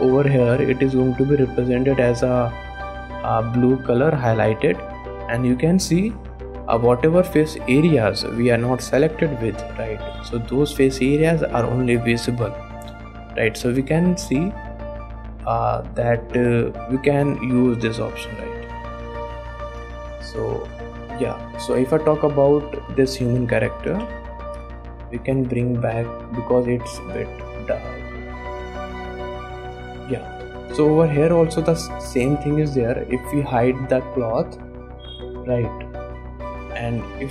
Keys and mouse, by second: 5.2-5.7 middle drag, 6.5 click, 7.2 middle click, 10.5 click, 10.9 middle click, 15.9 click, 16.9 click, 18.1 click, 20.6 click, 21.0 middle click, 21.9 click, 23.6 click, 24.0 a, 24.2 KP_Decimal, 25.1 click, 25.7 shift+middle click, 25.9 middle click, 26.5 shift+middle click, 27.7-29.5 drag, 29.9 shift+click, 30.6 ctrl+s, 31.0 shift+click, 32.1 click, 34.6 click, 36.3 click.